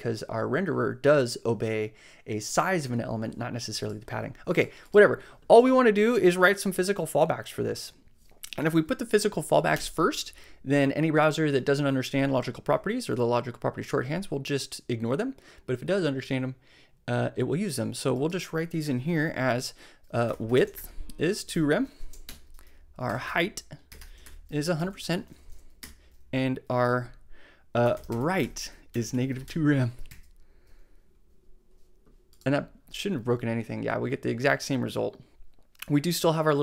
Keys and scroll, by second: 9.7 Return, 19.9-24.8 typing, 22.3 Return, 25.5 shift+Right, 25.8 Return, 27.6-29.9 typing, 29.9 super+m, 31.2 super+s.